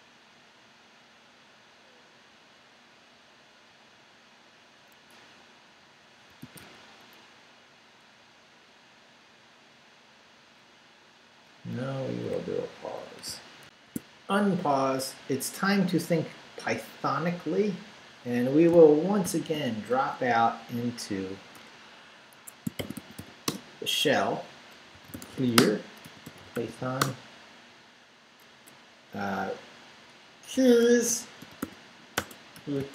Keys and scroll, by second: 6.1-7.1 typing, 10.6 BackSpace, 13.7 alt+shift+super+z, 19.2 shift+;, 21.5-23.7 typing, 22.3 Escape, 24.7-27.2 typing, 30.5-32.9 typing.